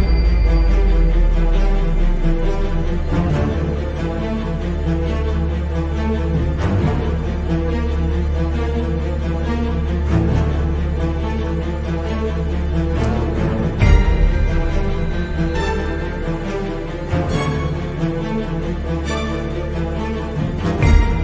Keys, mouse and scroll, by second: 2.6 click, 3.8 click, 4.6-10.3 drag, 11.4-11.9 shift+right drag, 12.2 scroll up 1, 12.6 shift+middle click.